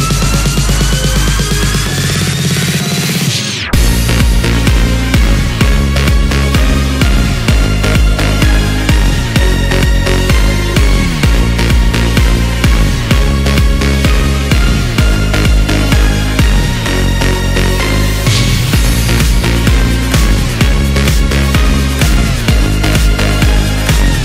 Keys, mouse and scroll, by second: 0.4 right click, 1.8-2.5 scroll down 8, 2.5 middle click, 3.3 KP_1, 3.7 Tab, 4.2-4.8 scroll down 1, 4.8 scroll down 4, 6.5-9.6 drag, 10.6 KP_7, 12.3-17.3 drag, 17.3-18.3 scroll up 1, 18.3 KP_1, 18.9-19.5 scroll up 2, 19.6 s, 22.1 g.